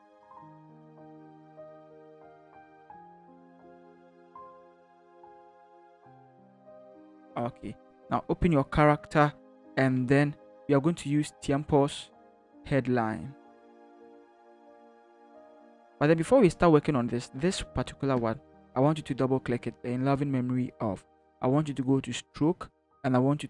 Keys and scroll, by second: 1.1 ctrl+v, 3.2 ctrl+d, 4.8 ctrl+d, 6.8 ctrl+v.